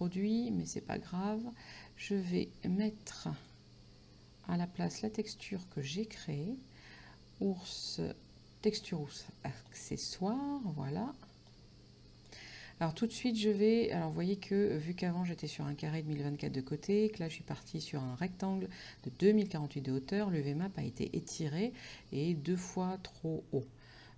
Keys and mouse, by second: 0.9 click, 3.4 click, 9.7 click, 11.6 click.